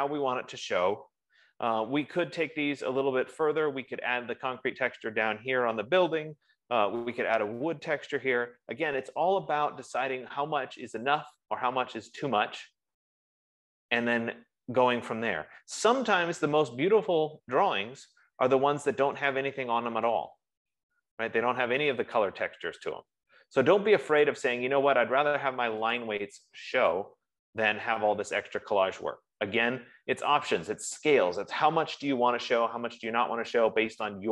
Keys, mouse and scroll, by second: 11.7 click, 19.7 click, 20.7 click, 24.6 click, 26.3 click, 27.4 click.